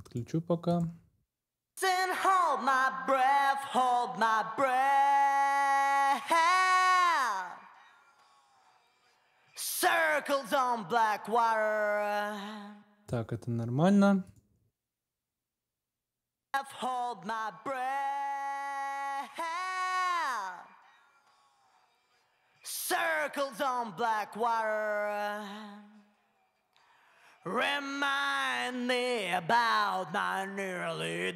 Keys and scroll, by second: 1.4 space, 12.5 space, 16.2 space.